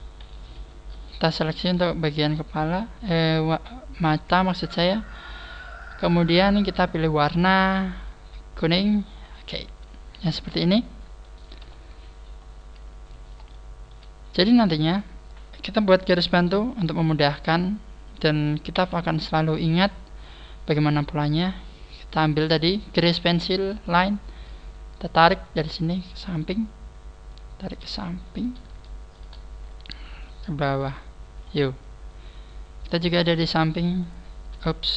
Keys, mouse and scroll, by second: 1.0 a, 1.5 alt+shift+right click, 2.0 alt+shift+right click, 3.1 click, 3.3 click, 4.4 click, 9.1 click, 9.7 a, 10.0 scroll down 4, 10.3 middle click, 11.6 KP_1, 12.4 scroll up 6, 13.5 shift+middle click, 14.5 scroll down 3, 14.9 right click, 17.6 scroll down 1, 18.7-19.3 scroll down 2, 18.7 t, 20.3-20.7 scroll up 4, 23.7 click, 28.8 shift+middle click, 29.0 shift+middle click, 32.3 scroll down 3, 33.3-33.7 scroll down 1.